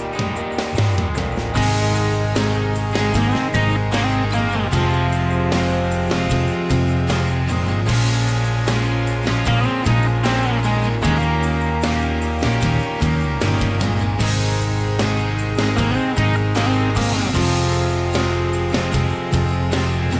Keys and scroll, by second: 1.5 b, 2.1 Escape, 2.2 Escape, 7.5 Escape, 7.6 Escape, 7.8 Escape.